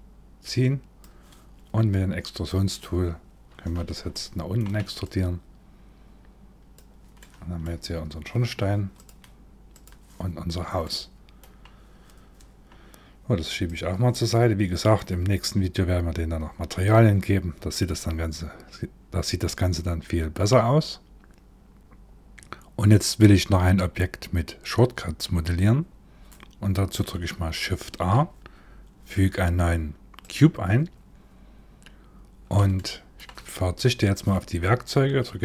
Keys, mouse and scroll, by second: 1.9 click, 3.7 shift+middle click, 4.7 click, 6.8 middle click, 8.6 click, 9.9-10.4 scroll down 3, 10.4 middle click, 12.0-12.8 scroll down 1, 12.8 scroll down 1, 13.3 click, 27.4 shift+a, 31.2-31.8 scroll up 3, 32.4 shift+middle click.